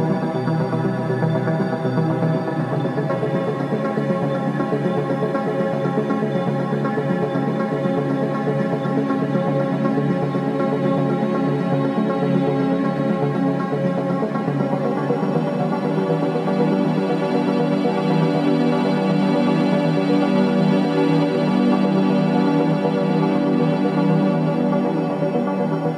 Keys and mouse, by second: 5.6 click, 6.2 Tab, 6.7 middle click, 7.2 Tab, 9.9 click, 14.0-19.2 drag, 19.9-25.9 drag.